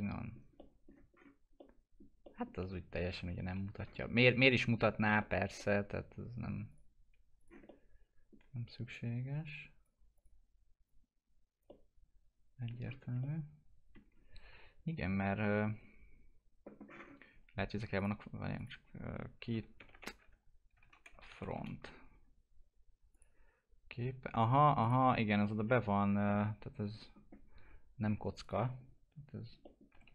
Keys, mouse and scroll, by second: 0.5 middle click, 1.1-1.5 scroll up 1, 1.5 middle click, 2.5 scroll down 1, 4.0 alt+middle click, 4.5-4.8 scroll down 1, 4.8 middle click, 6.0-6.6 scroll up 1, 6.6 click, 7.4 scroll up 1, 7.6 alt+middle click, 8.9 click, 10.1 click, 11.9 alt+middle click, 12.8 scroll down 1, 13.2-15.4 alt+middle drag, 15.4-16.8 scroll down 1, 17.9 click, 19.4-21.5 typing, 23.1 click, 28.4 click, 28.7-29.1 scroll up 1, 29.6 middle click, 29.9 e.